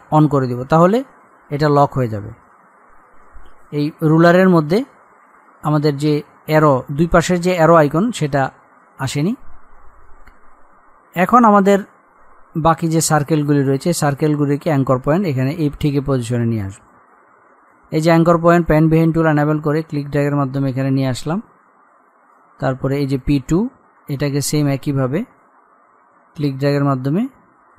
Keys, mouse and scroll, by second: 3.1 z, 10.0-10.4 scroll up 1, 12.9 click, 18.4-22.0 drag, 22.0-22.7 scroll up 1, 23.1 click, 26.6-27.7 drag.